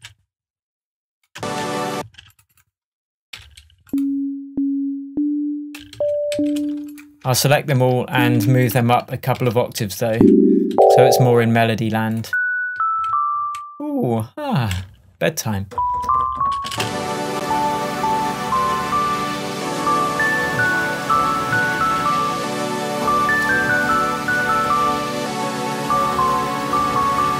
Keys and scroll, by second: 1.4 space, 3.4 p, 7.3 shift+BackSpace, 8.4 BackSpace, 9.0 super+BackSpace, 9.4 super+a, 10.0 shift+super+a, 12.8 Down, 14.8 Delete, 16.8 space.